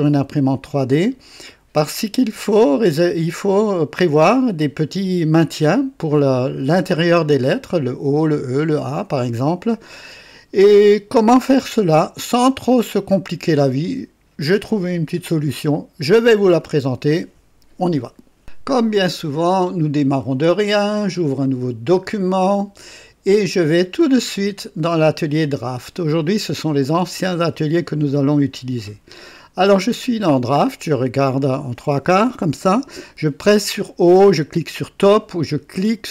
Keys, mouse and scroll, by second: 0.6 click, 1.8 scroll up 1, 10.8 scroll down 1, 11.7 right click, 12.8-14.7 drag, 15.5 click, 21.8 click, 24.2 click, 25.6 click.